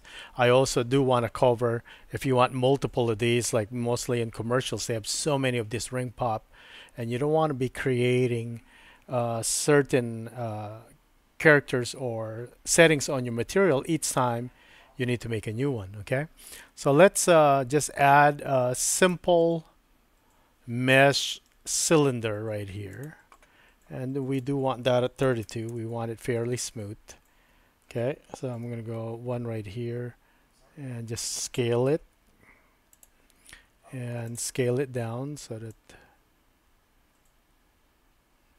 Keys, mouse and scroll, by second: 16.6-18.4 drag, 19.1-23.0 drag, 24.3-26.2 drag, 28.7 KP_1, 32.0 s, 34.3 drag, 35.8-38.5 drag, 35.9 typing.